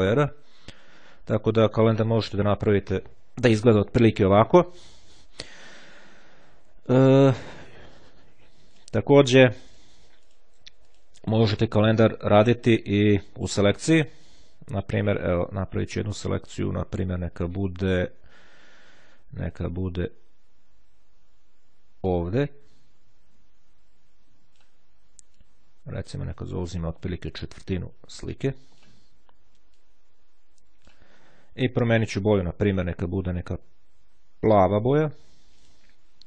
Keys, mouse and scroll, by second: 8.2-9.4 drag, 9.8 click, 10.9 click, 11.8 click, 15.0 click, 22.2-25.2 drag, 25.5-27.7 drag, 28.0-29.4 drag, 29.9-31.6 drag, 32.4 click, 34.3-35.3 drag, 35.7 click.